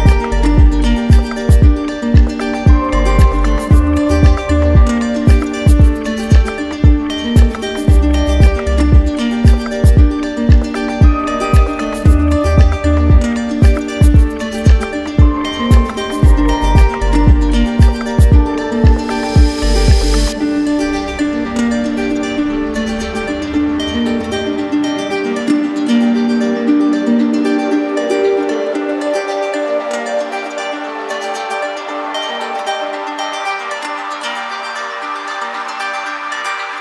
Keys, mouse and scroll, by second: 0.6 alt+click, 2.9 click, 3.8 alt+click, 4.7 click, 6.2 click, 11.3-12.5 drag, 14.3 click, 15.6 shift+click, 17.1 shift+click, 18.0 shift+click, 18.9 shift+click, 19.6 shift+click, 20.2 shift+click, 21.1 shift+click, 22.3 shift+click, 23.0 shift+click, 23.7 shift+click, 24.2 shift+click, 24.9 shift+click, 27.5 click, 27.9 shift+click, 29.3 shift+click, 29.9 shift+click, 30.8 shift+click, 31.3 shift+click, 31.8 shift+click, 32.4 shift+click, 33.2 shift+click, 33.9 shift+click, 34.3 shift+click, 34.6 shift+click, 35.1 shift+click, 35.6 shift+click, 36.3 shift+click.